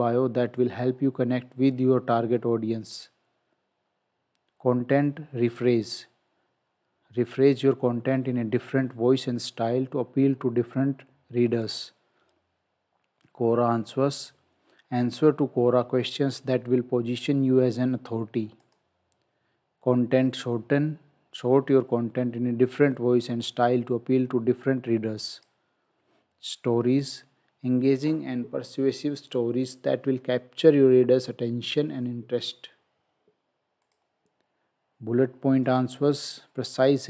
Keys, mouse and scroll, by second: 2.9 click, 11.6 click, 18.6 click, 25.4 click, 33.9 click.